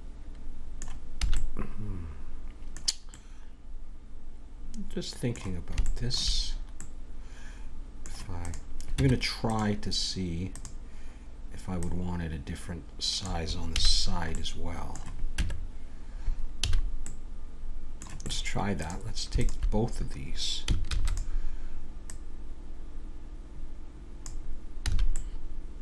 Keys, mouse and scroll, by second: 1.2 a, 4.8-7.6 middle drag, 8.4-12.3 right drag, 8.9 Tab, 12.3-13.6 drag, 13.7 a, 13.9-16.7 middle drag, 15.4 Tab, 16.7 a, 17.0 middle click, 18.7-22.0 right drag, 20.9 shift+d, 22.0-23.8 drag, 24.8 a, 25.1-25.8 middle drag.